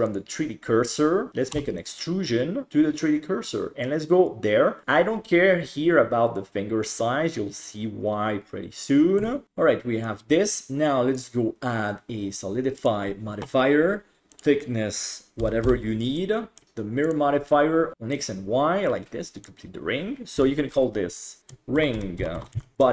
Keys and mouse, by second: 1.6 e, 2.7 s, 9.3 Tab, 9.4-10.0 middle drag, 11.2-12.9 drag, 14.4-15.6 drag, 16.2-16.6 middle drag, 16.6 click, 18.1-19.4 middle drag, 20.4 F2.